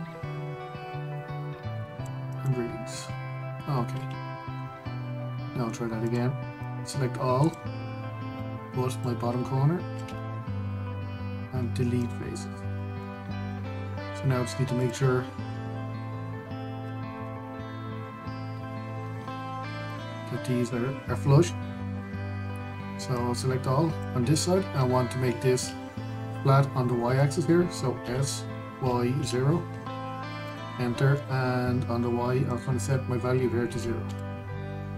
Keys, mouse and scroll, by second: 3.0 click, 6.7 click, 9.0 shift+click, 10.7 x, 13.5 shift+middle click, 13.9-14.6 scroll up 1, 15.5 click, 16.4 scroll down 1, 17.4-17.8 scroll up 1, 17.8 Tab, 19.4 q, 21.2 scroll up 1, 22.7 Tab, 23.8 click, 28.7 s, 33.2-34.9 drag.